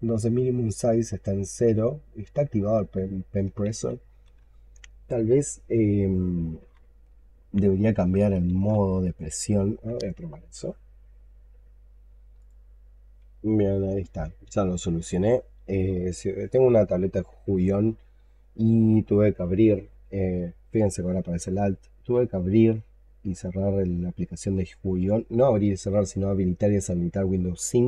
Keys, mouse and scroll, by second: 3.5 ctrl+z, 8.4 ctrl+z, 18.3 alt+click, 20.7 alt+click, 22.1 alt+click, 22.1 double click, 22.5 double click.